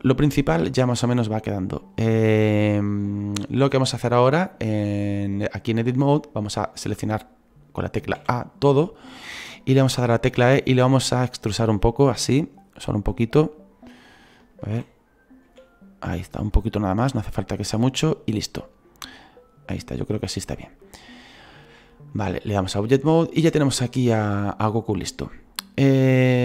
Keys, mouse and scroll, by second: 18.2-20.8 scroll down 2, 20.8-22.6 scroll down 1, 22.6-23.8 scroll down 1, 23.8-26.4 scroll down 1.